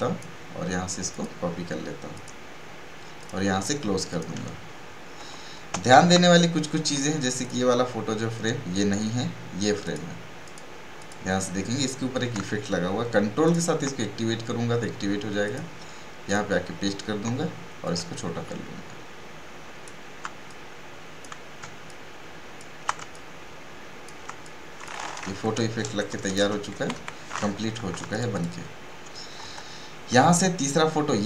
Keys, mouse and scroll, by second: 5.2 v, 7.4 click, 18.1-21.8 alt+shift+drag, 21.8 alt+shift+click, 23.1-25.8 ctrl+drag, 25.8 shift+Right, 28.0 space, 28.1 right click, 28.3 click.